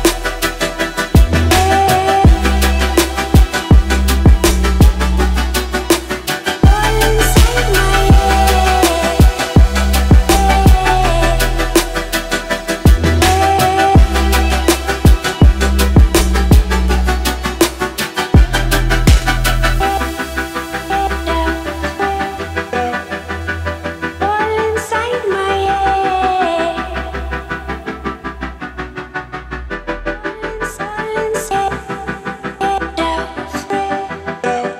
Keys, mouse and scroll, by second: 8.5-9.2 middle click, 9.3-10.4 scroll up 1, 10.4-12.3 drag, 12.3-13.0 scroll down 1, 13.0-13.7 middle click, 14.0-17.4 drag, 19.6-26.8 drag, 26.9-27.5 scroll up 1, 27.5-28.8 middle drag, 30.9-34.7 drag.